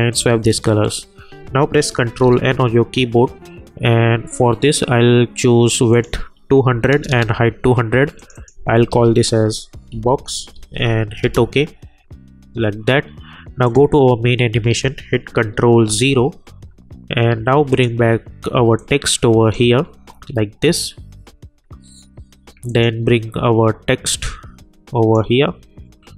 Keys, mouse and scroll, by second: 2.8 ctrl+n, 5.9 click, 8.2 click, 8.9 ctrl+a, 9.7-11.0 typing, 11.2 Return, 13.6 click, 15.7 ctrl+0, 17.7-21.9 drag, 22.6-26.1 drag.